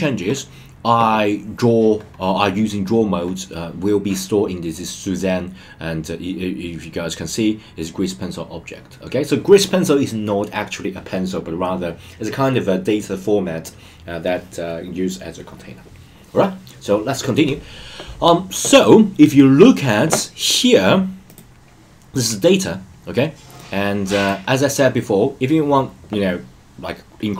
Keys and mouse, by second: 23.6-27.3 drag.